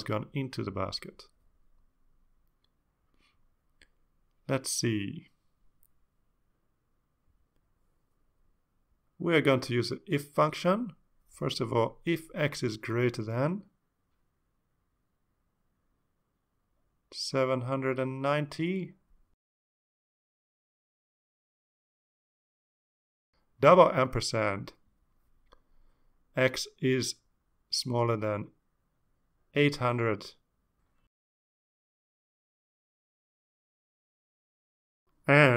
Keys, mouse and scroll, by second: 6.8 click, 7.8-8.5 scroll down 3, 8.8-9.9 scroll down 6, 10.3 click, 11.9 BackSpace, 12.6 Return, 13.6-16.0 typing, 17.3 click, 18.1 click, 20.9 click, 22.2 Tab, 23.3 click, 24.2-25.2 typing, 27.8-29.0 typing, 30.3 Right, 30.6-32.6 typing.